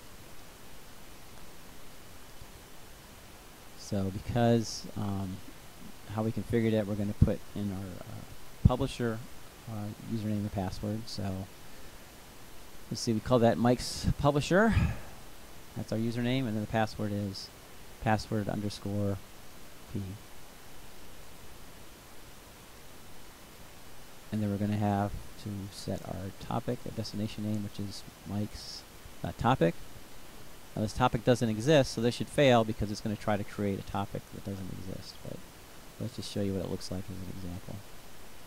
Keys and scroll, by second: 9.1-14.0 typing, 17.5-20.0 typing, 26.5-29.1 typing.